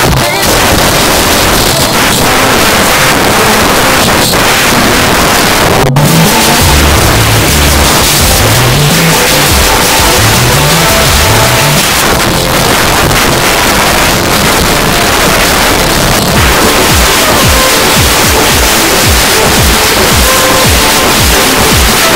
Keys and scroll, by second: 0.3 Up, 0.4 Return, 6.0 typing, 11.8 Page_Down, 16.1 typing, 22.1 space.